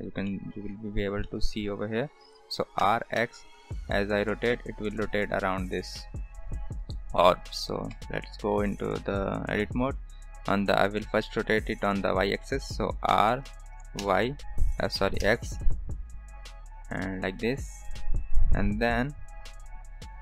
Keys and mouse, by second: 0.2 middle click, 1.2-1.5 shift+middle drag, 2.8 r, 7.9 KP_0, 13.1 r.